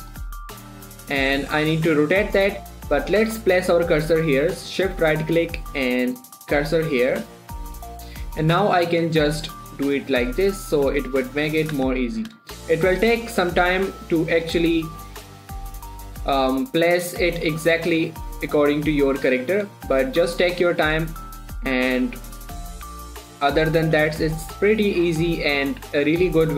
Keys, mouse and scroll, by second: 0.8 shift+r, 2.0 right click, 2.6 shift+middle click, 2.8 scroll up 1, 3.2 shift+middle click, 3.4-3.8 scroll up 1, 5.4 shift+right click, 6.3 click, 8.5 scroll down 1, 9.2 r, 12.0 click, 12.3 shift+middle click, 12.5 scroll up 2, 12.9 shift+middle click, 13.2-14.7 scroll up 1, 14.7 click, 15.6 shift+click, 20.1 scroll down 2, 20.2 g, 20.8 click, 21.0 r, 21.5 right click, 22.4 click, 23.2 r, 23.6 click, 23.7 g, 24.1 click, 24.3 r, 24.7 click, 25.9 shift+click.